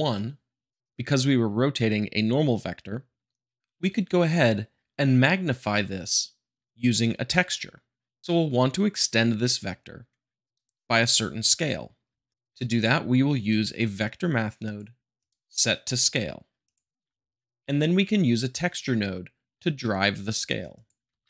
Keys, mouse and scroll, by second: 0.7 middle click, 12.7 q, 13.4-14.5 drag, 14.6-15.7 drag, 16.6-17.0 drag, 17.0 middle click, 20.7 click, 21.0 shift+a.